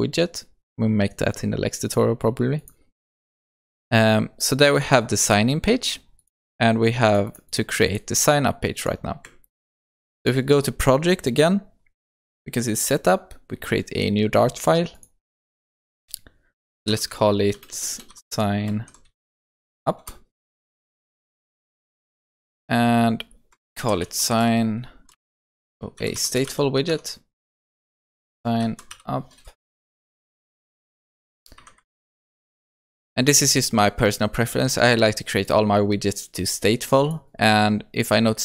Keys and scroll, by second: 9.7 ctrl+s, 27.0 Tab, 31.9 alt+Return.